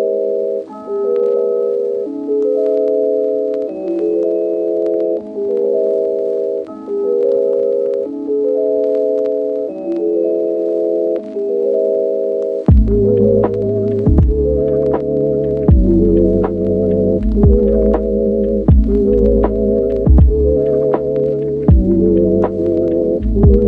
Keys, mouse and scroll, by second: 0.2-1.2 middle drag, 1.2 shift+click, 1.4-3.3 middle drag, 3.3 click, 3.4 middle click, 4.0 shift+middle click, 5.0 alt+e, 7.3 shift+click, 7.4-8.9 middle drag, 8.9 Tab, 9.1 click, 14.4 s, 16.1 middle click, 16.3 shift+middle click, 16.8 click, 17.3 middle click, 18.9 click, 19.4 middle click, 21.3 a.